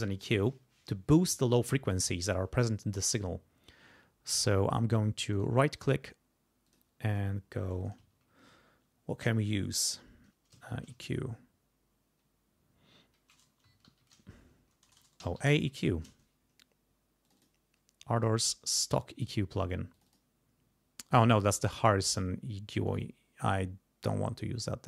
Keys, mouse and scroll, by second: 5.3 right click, 6.7 click, 10.5-11.4 typing, 13.4-16.2 typing, 17.3 click, 18.2 click, 20.0 click, 22.1 click, 22.9 right click, 24.1 click.